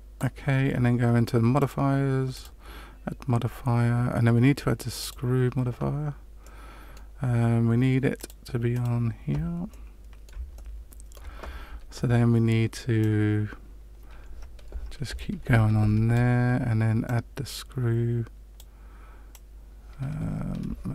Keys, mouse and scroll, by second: 1.5 click, 2.3 click, 6.4 middle click, 8.1 click, 9.7 middle click, 10.5 shift+middle click, 12.9 click, 17.0 click, 19.3 click.